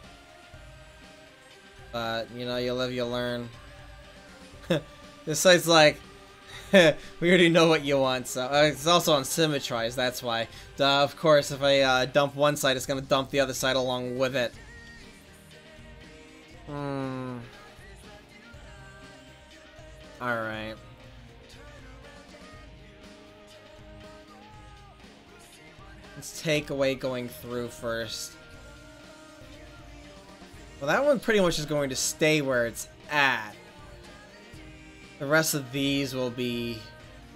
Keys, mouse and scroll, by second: 0.1-0.8 middle drag, 0.1-0.6 right drag, 1.8-2.8 right drag, 3.8-5.9 right drag, 6.9 right click, 7.4 click, 7.4 middle click, 8.4 middle click, 17.5 middle click, 20.9-22.0 drag, 25.8-28.5 drag, 28.5-29.6 right drag, 29.6-31.8 middle drag, 34.3 right click, 34.7 middle click, 34.9 right click.